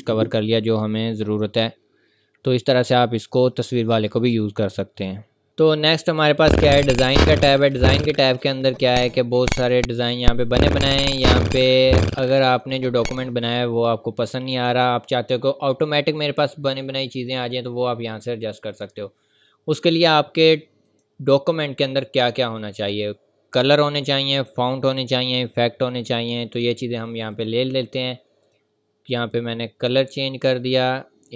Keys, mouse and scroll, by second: 5.5 click, 8.0 click, 11.7-12.2 scroll down 1, 12.5 click, 20.9 click, 27.3 click.